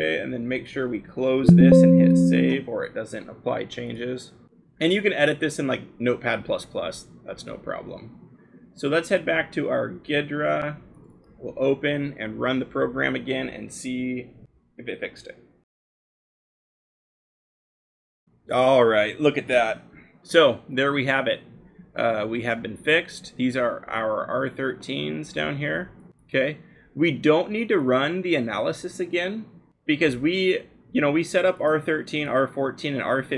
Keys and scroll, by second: 17.8-19.9 scroll.